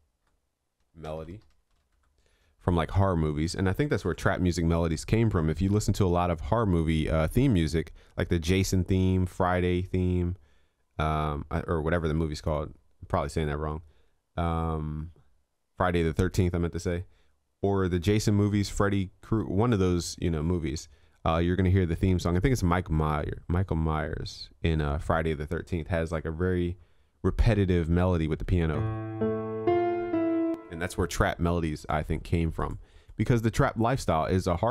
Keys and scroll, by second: 4.2 ctrl+s.